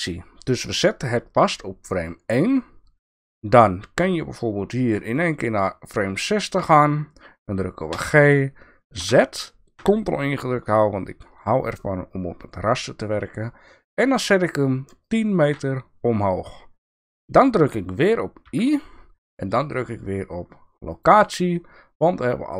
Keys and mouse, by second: 7.9 g, 18.4 i.